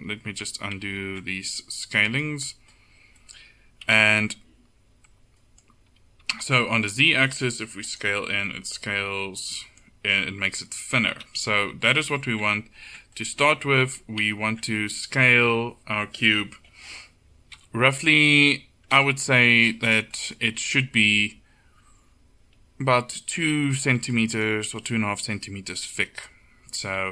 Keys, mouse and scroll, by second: 0.2 ctrl+z, 0.9 ctrl+z, 3.9 KP_7, 6.3 s, 8.2 Tab, 8.7 middle click, 11.2 KP_7, 12.1 Tab, 14.0 ctrl+z, 14.3 ctrl+z, 17.6 KP_1, 27.0 Tab.